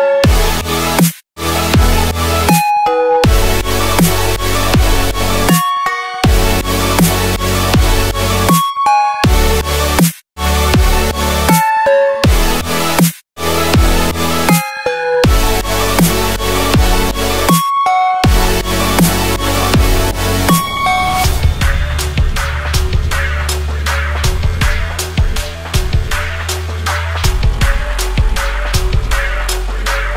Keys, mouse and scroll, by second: 0.0-6.3 drag, 6.4 click, 7.0 shift+click, 8.0 click, 11.3 Down, 11.6 Down, 11.7 Down, 11.9 Down, 13.9 click, 16.6 ctrl+g, 17.7 click, 20.0 ctrl+d, 20.4-23.0 drag, 23.8 ctrl+d, 25.0-26.0 typing, 27.3-30.1 drag.